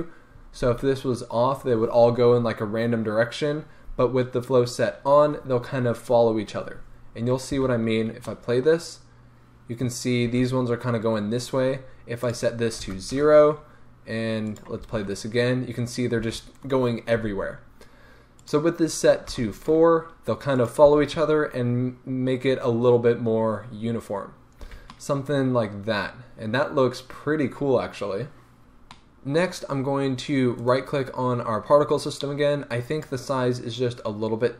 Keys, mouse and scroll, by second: 7.6 space, 8.3-12.2 middle drag, 10.3 space, 12.2-14.6 drag, 13.2 Return, 14.9 space, 16.3 space, 18.4-19.7 drag, 20.6 click, 20.9 space, 24.7 space, 24.9-30.7 middle drag, 30.7 right click, 32.9 click.